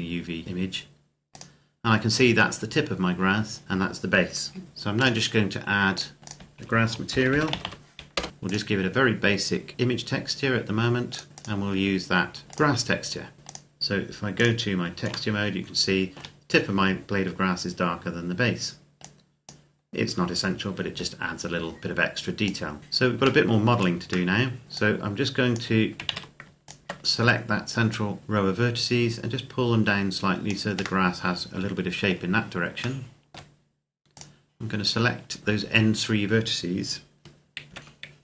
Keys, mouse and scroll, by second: 1.1 click, 4.8 click, 6.9-7.4 typing, 7.9 Return, 8.3 click, 10.9 click, 15.1 shift+middle click, 17.3-18.2 scroll down 1, 18.8 click, 19.6-21.5 scroll up 1, 22.3 click, 22.8 Tab, 23.2 shift+middle click, 24.6 click, 26.0 ctrl+z, 26.4 alt+right click, 27.7 click, 30.8 middle click, 31.9 scroll down 1, 32.8 shift+middle click, 33.9 right click, 35.4 shift+right click, 37.5 KP_1.